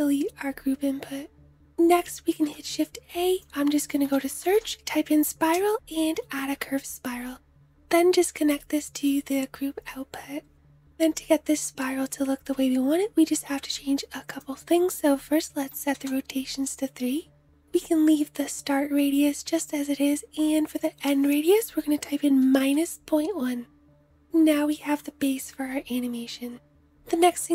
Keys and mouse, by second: 2.2 shift+a, 7.3 middle click, 7.5 click, 8.2-23.9 middle drag.